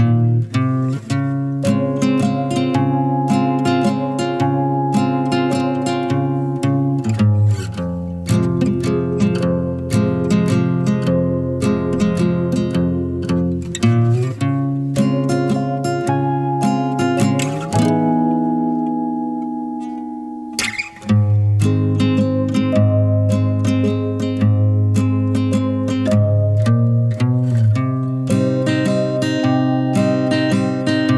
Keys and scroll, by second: 8.5 5, 10.0-10.5 typing, 20.2 1, 21.5-23.1 typing.